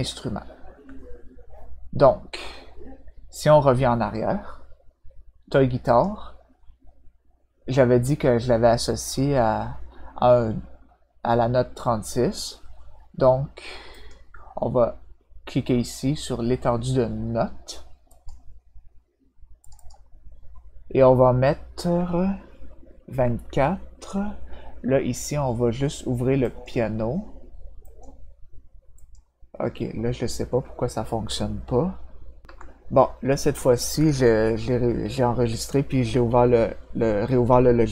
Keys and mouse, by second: 5.8 click, 13.9 click, 18.0 click, 19.6 click, 19.7 click, 26.4 click, 27.8 click, 28.9 click, 32.4 ctrl+F7.